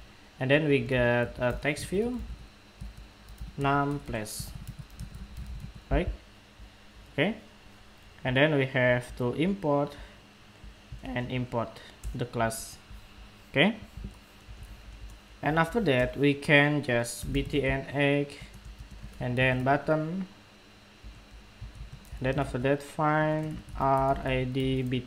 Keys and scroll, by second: 8.7 alt+Return.